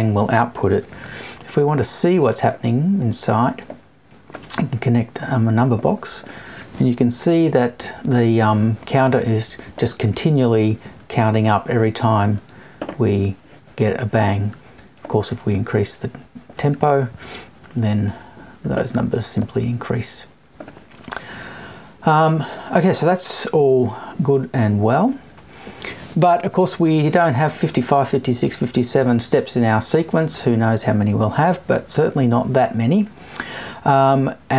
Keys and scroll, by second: 7.1 Left, 7.8 Right.